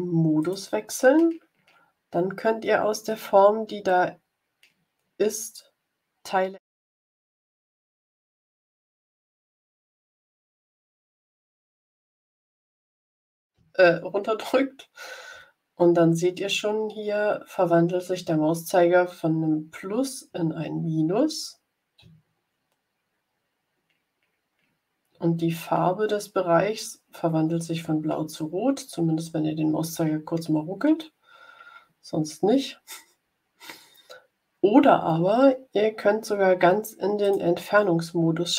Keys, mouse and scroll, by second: 0.3 click, 37.1 click.